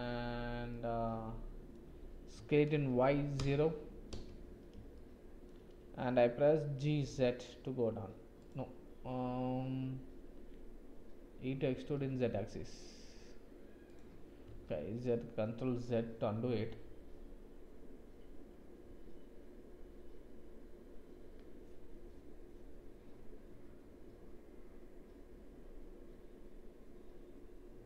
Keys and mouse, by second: 0.7-1.7 drag, 2.3 s, 4.9 shift+click, 6.8 g, 11.5 e, 14.4 ctrl+z.